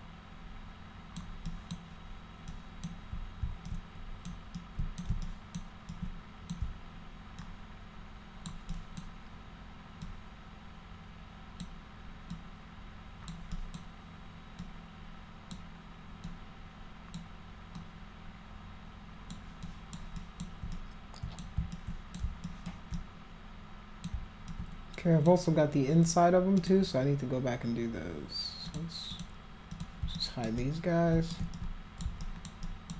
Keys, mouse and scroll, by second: 1.4 alt+click, 2.5 alt+click, 3.6 click, 4.5 shift+click, 5.2 alt+click, 5.8 alt+click, 7.4-8.5 alt+drag, 8.7 alt+click, 10.0-11.6 alt+drag, 12.3 alt+click, 13.5 alt+click, 14.6 alt+click, 16.2 alt+click, 17.7-19.3 alt+drag, 19.6 alt+click, 20.1 alt+click, 20.7 click, 21.7 alt+click, 22.4 alt+click, 22.9-24.0 drag, 24.4 alt+click, 26.6 click, 28.6 click, 29.1 click, 29.7 click, 30.1 alt+click, 30.5 click, 31.5 alt+click, 32.2 alt+click, 32.6 alt+click.